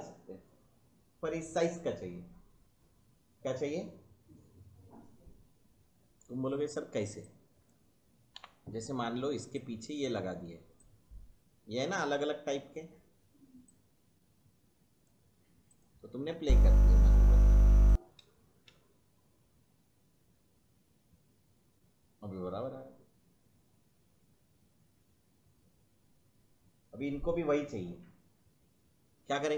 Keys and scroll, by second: 8.3 Delete, 16.4 space, 18.1 space, 26.5 space.